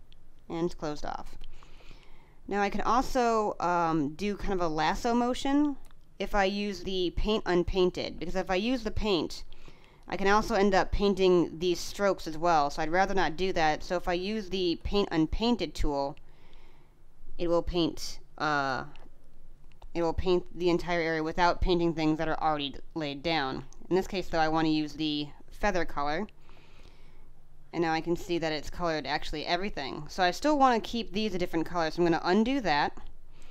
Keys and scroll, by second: 1.0 space, 3.5 space, 8.0 space, 12.7 space, 18.3 space, 19.9 space, 26.4 space.